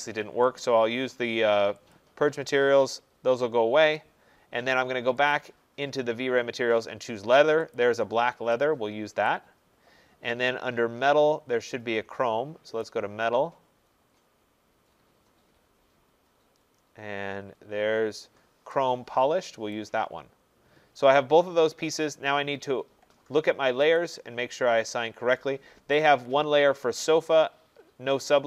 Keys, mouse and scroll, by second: 1.9 click, 5.3 click, 7.8 click, 9.3 click, 11.4 middle click, 11.5 middle click, 12.9 click, 14.0 middle click, 14.4 middle click, 14.9 middle click, 15.5 middle click, 15.7 middle click, 15.9 middle click, 17.0 middle click, 19.7 click, 24.0 click.